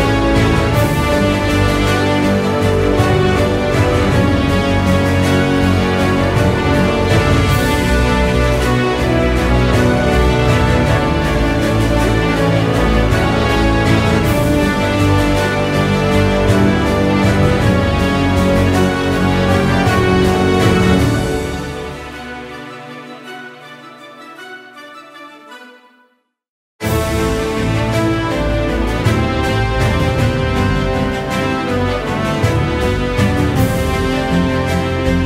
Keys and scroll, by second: 17.2 ctrl+0.